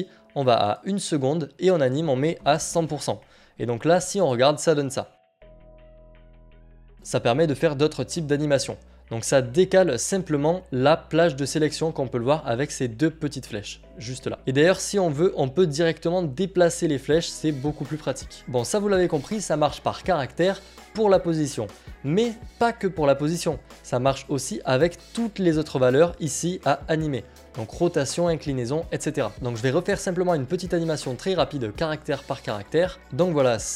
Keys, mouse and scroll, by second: 2.3 click, 4.2 click, 6.9-8.6 drag, 11.7-14.4 drag, 24.2 click, 24.9 click.